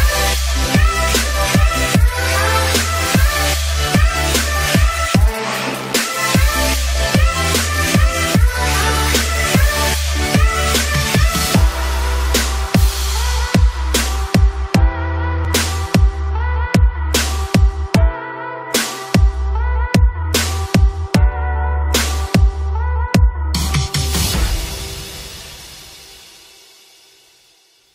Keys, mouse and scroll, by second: 4.5-5.2 scroll down 1, 6.0-17.2 drag, 18.0-21.1 drag.